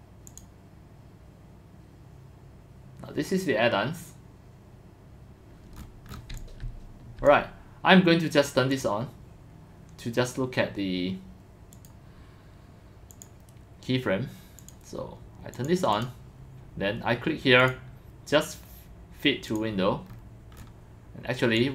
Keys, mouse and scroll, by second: 0.3 click, 6.4 click, 6.4 x, 6.7 c, 8.7 click, 11.7 click, 12.1 click, 13.1 click, 14.6 click, 15.5 click, 16.0 click, 17.6 click, 19.5 click, 21.6 click.